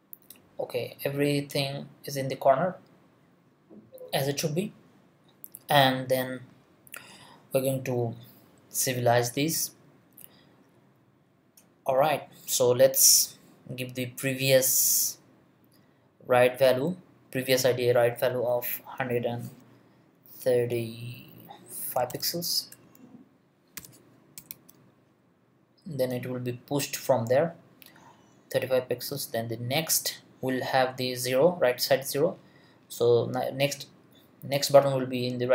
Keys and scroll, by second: 19.1 l, 21.7-22.7 typing, 24.1-25.0 typing.